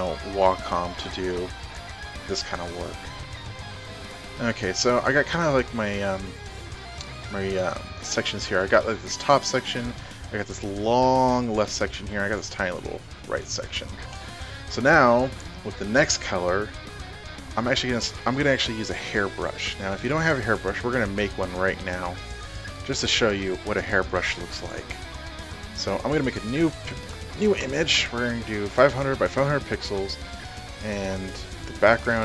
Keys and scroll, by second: 0.0 e, 2.9 b, 27.5-29.1 typing, 28.2 Tab, 29.5 Tab, 30.7 Down, 31.3 Up, 31.5 Tab, 31.8 Down.